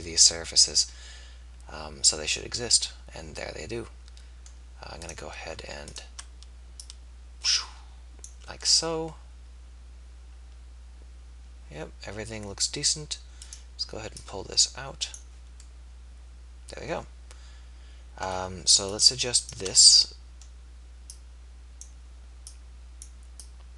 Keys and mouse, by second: 0.9 middle click, 1.6 middle click, 3.0 middle click, 5.1 click, 6.3-8.4 drag, 8.7-11.3 middle drag, 13.5 click, 15.8-18.7 middle drag, 19.5 click, 20.0-21.0 middle drag, 21.6-23.7 right drag.